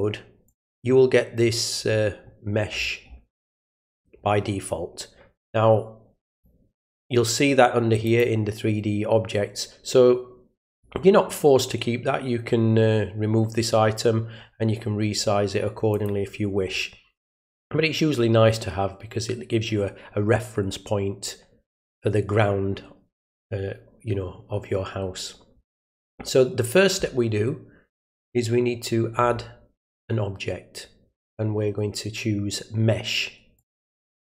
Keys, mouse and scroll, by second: 0.4 click, 1.4-3.1 scroll down 5, 4.1 scroll down 1, 6.3 click, 8.0 click, 15.9 click, 16.7 middle click, 17.3 middle click, 29.8 click, 33.5 click.